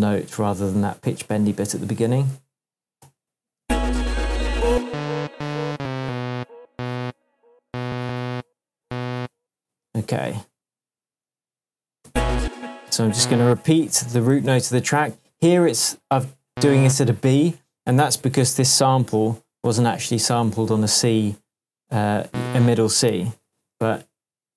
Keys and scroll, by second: 3.0 shift+super+m, 3.6 shift+super+space, 12.0 space, 14.0 super+d, 18.3 shift+Tab, 20.3 shift+Tab, 23.1 super+d.